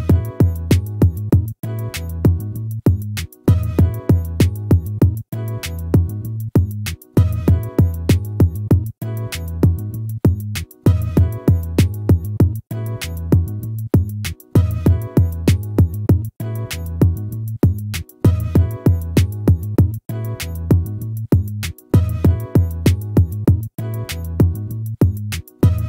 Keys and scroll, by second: 10.7 ctrl+z, 19.3 ctrl++.